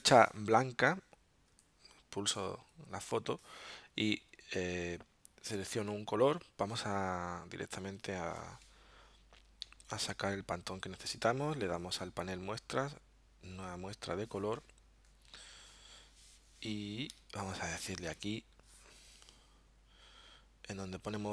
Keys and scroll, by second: 1.5 a, 9.6 alt+super+0, 17.2 super+-.